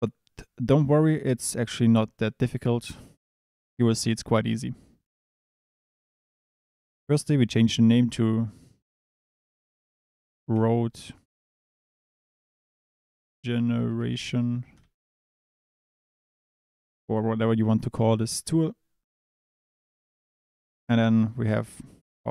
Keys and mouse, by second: 6.5-14.7 drag.